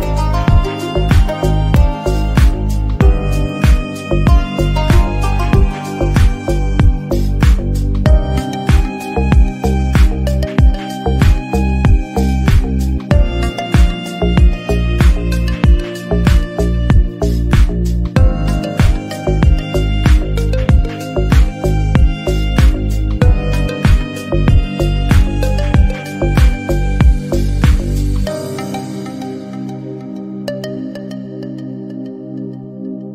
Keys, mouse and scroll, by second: 0.0-1.8 typing, 1.0 Tab, 2.6 ctrl+f, 3.4 e, 4.4 click, 5.1 s, 5.6 g, 6.8 2, 7.3 alt+click, 7.8 ctrl+b, 9.2 click, 9.3 shift+middle click, 9.9 ctrl+b, 10.9 ctrl+b, 11.7 3, 12.2-13.5 alt+drag, 13.7 e, 14.9 Tab, 15.0-15.6 scroll down 2, 15.1 shift+middle click, 15.6 KP_1, 15.8 shift+middle click, 16.1 scroll down 1, 16.3 ctrl+a, 17.3-17.7 drag, 18.0 click, 19.2 click, 20.3 g, 20.9 s, 22.0 shift+middle click, 22.3 Tab, 22.6 alt+z, 22.9 3, 22.9 click, 23.1 Delete, 23.7 ctrl+r, 24.5-25.8 alt+drag, 25.9 s, 27.0 click, 27.4 s, 28.9 alt+click, 29.3-29.6 scroll up 3, 29.4 shift+middle click, 29.6 shift+middle click, 30.4 e, 31.0 s, 32.6 e.